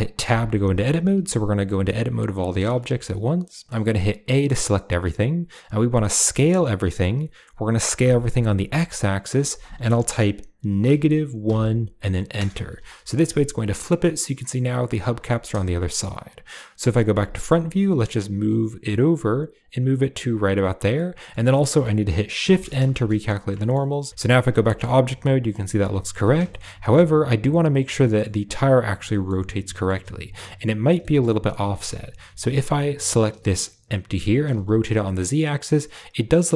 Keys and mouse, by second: 0.2 Tab, 1.0 a, 2.7 shift+middle click, 4.2 a, 6.2 s, 13.2 middle click, 16.7 KP_1, 17.7 g, 20.9 middle click, 21.6 middle click, 22.5 shift+n, 22.8 shift+middle click, 23.1 click, 23.5 shift+middle click, 23.8 middle click, 24.5 shift+Tab, 24.6 shift+middle click, 25.0-26.1 middle drag, 26.1 a, 26.4 shift+middle drag, 27.6 click, 27.9 drag, 28.7 shift+drag, 29.0 middle drag, 29.1 click, 29.6 middle click, 30.9 shift+middle click, 31.6 shift+middle click, 33.0 click, 33.4 middle click, 34.1 r.